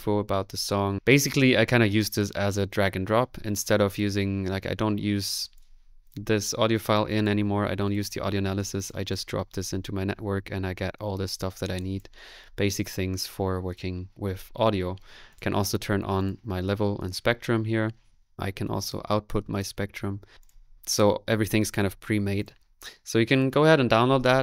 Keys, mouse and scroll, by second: 4.7 middle click, 5.5 click, 6.4-7.7 drag, 8.0 click, 8.8 click, 11.8 click, 12.1 click, 12.2-15.0 middle drag, 15.5 click, 16.3 click, 20.3-21.4 drag, 20.3 n, 22.4 click, 23.0 Delete, 23.4 click.